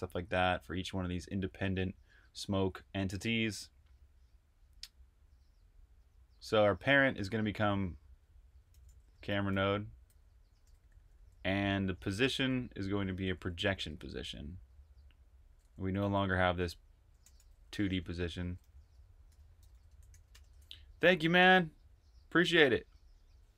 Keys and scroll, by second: 1.2 typing, 6.0-6.8 typing, 8.4-12.2 typing, 14.4-20.7 typing.